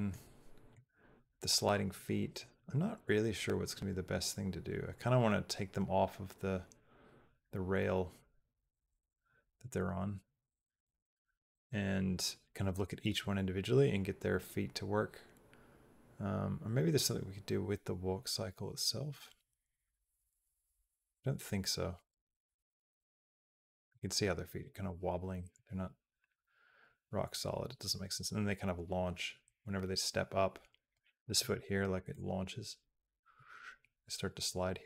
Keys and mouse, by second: 0.6-30.8 drag, 31.9-34.8 drag.